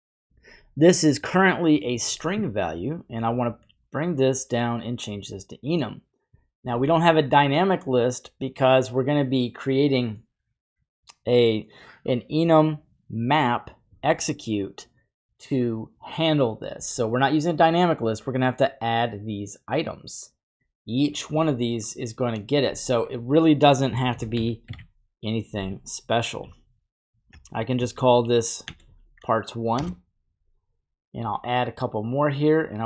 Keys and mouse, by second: 3.3-4.9 drag, 19.2 click, 22.9 click, 31.1 click, 31.8 click, 32.7-32.8 drag.